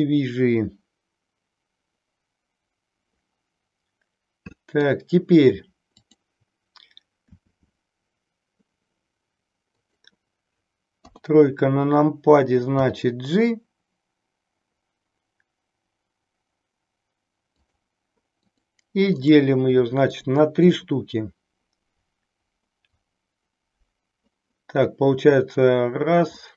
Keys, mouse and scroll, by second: 5.8 click, 7.3 e, 9.8 click, 11.1 KP_3, 12.8 g, 17.7 click, 19.2-20.3 right drag, 26.4 middle click.